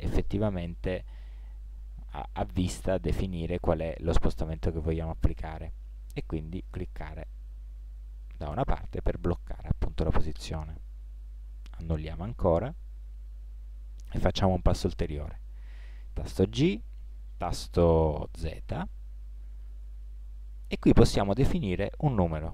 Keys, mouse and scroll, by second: 8.8 middle click, 12.1 ctrl+z, 16.7 g.